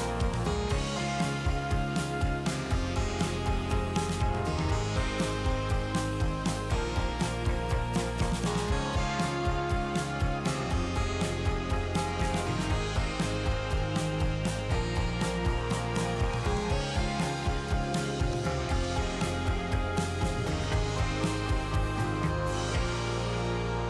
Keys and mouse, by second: 0.7 click, 1.1 click, 1.7 click, 2.0 click, 2.8 ctrl+z, 2.9 ctrl+z, 4.6 click, 8.0 click, 9.8 ctrl+z, 10.3 middle click, 11.7 click, 12.0 ctrl+z, 12.2 click, 13.0 middle click, 14.3 middle click, 15.7 ctrl+z, 16.1 middle click, 17.6 shift+click, 23.1 middle click.